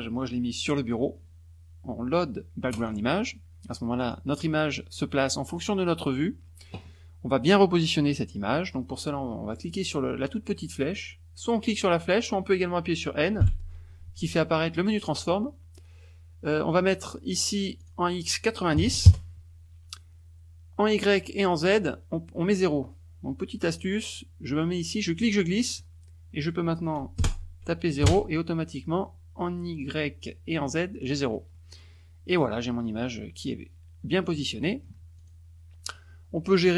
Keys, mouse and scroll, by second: 0.6 click, 2.7 click, 4.0 click, 13.4 n, 17.8 click, 18.7 KP_9, 19.0 KP_0, 19.1 KP_Enter, 20.8 click, 23.7 click, 25.2 click, 27.2 KP_0, 28.0 KP_Enter, 31.5-32.5 middle drag, 32.6 scroll up 1, 32.9-35.0 middle drag, 35.1 click.